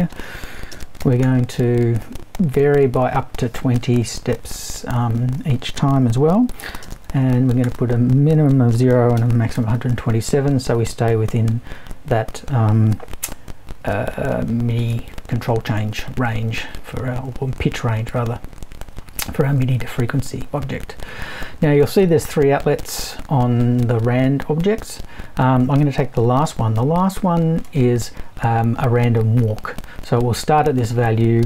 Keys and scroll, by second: 0.7-1.7 typing, 6.9 space, 7.6 0, 8.7-10.0 typing.